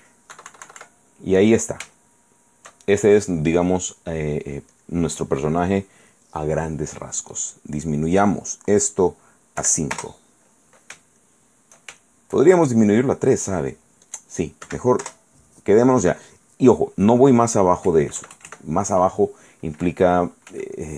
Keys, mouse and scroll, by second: 0.5 KP_Subtract, 2.2 shift+click, 3.8 click, 4.9 click, 7.5 click, 9.8 5, 10.1 Return, 11.4 shift+middle click, 11.6 shift+click, 12.0 shift+right click, 13.7 right click, 14.2 click, 14.8 3, 15.2 Return, 18.1 KP_Add, 20.7 f.